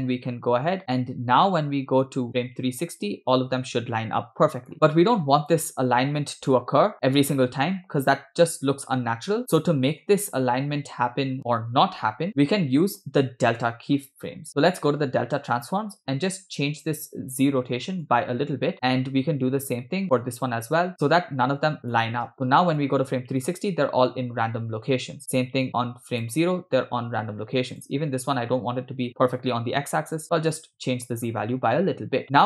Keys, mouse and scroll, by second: 0.8 scroll down 2, 0.8 space, 1.1-4.7 drag, 5.5 click, 6.7 click, 6.9 space, 7.3-8.1 scroll up 4, 8.1 scroll down 3, 12.3 space, 14.5 click, 16.7-17.1 scroll down 3, 18.1 click, 20.9-22.0 drag, 22.4 space, 22.9 click, 25.8 click, 27.7 click, 30.6 click, 32.1 scroll up 2, 32.2 scroll down 2, 32.2 space.